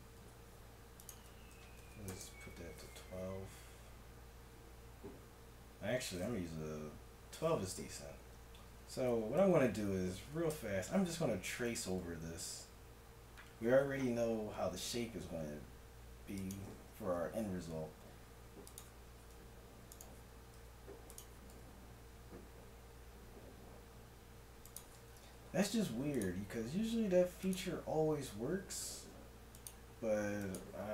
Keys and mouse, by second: 0.2 F6, 5.0 middle click, 8.1 z, 8.8 z, 9.4 KP_1, 9.9 Tab, 10.5 z, 11.7 e, 18.0 s, 19.3 s, 20.5 s, 21.5 s, 25.0 middle click, 25.8 ctrl+r, 28.8 ctrl+r.